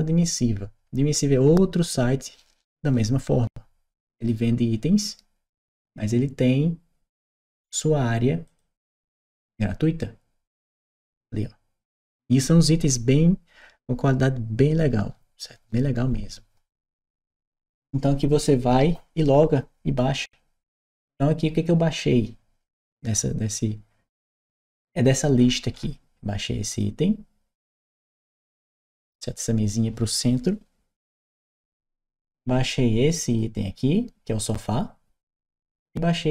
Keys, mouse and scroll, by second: 3.9 click, 8.2 click, 28.3 click, 36.1 click.